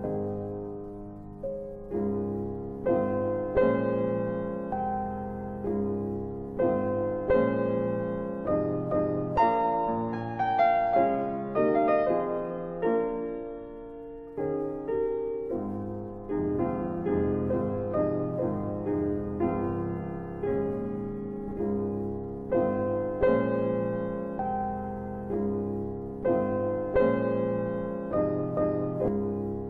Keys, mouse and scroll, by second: 1.4 click, 3.3 shift+click, 8.9 click, 14.1 alt+middle click, 16.5 middle click, 18.7 shift+click, 21.1 middle click, 21.3-21.9 scroll down 2, 21.9 middle click, 24.3 ctrl+z, 25.7 click, 26.7 shift+click, 28.8 shift+click.